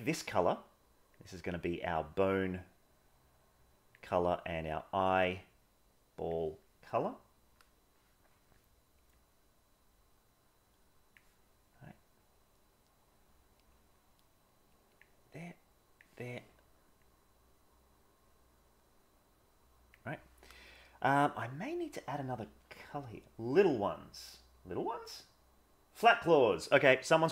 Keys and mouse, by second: 1.2-3.9 drag, 4.6-6.3 drag, 9.2-11.1 drag, 11.8-15.0 drag, 15.4 click, 17.0-19.9 drag, 22.1 middle click.